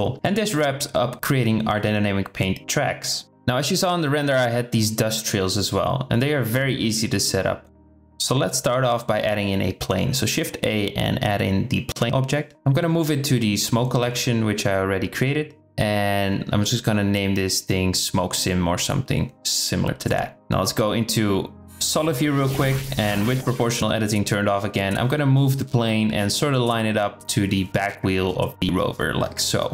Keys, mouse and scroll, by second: 3.0-3.5 drag, 8.5 shift+a, 12.0 m, 15.0 click, 15.6 click, 16.4-18.8 drag, 18.8 KP_7, 20.5 z, 23.3 g, 25.7 shift+drag, 26.3-26.6 shift+middle drag, 27.0 shift+middle click, 28.1 shift+middle click, 28.5 g.